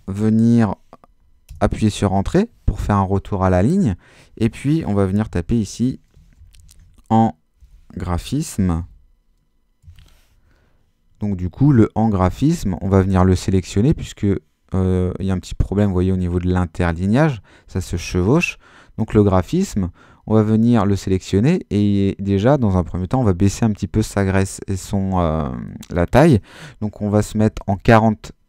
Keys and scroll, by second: 1.5 Return, 5.2-9.8 typing, 27.3-28.2 typing.